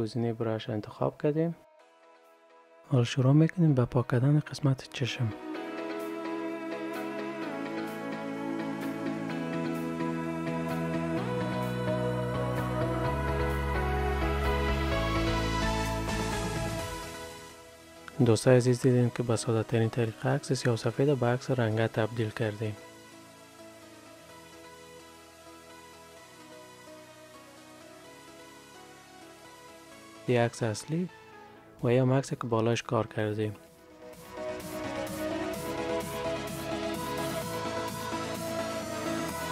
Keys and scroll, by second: 22.5 ctrl+s.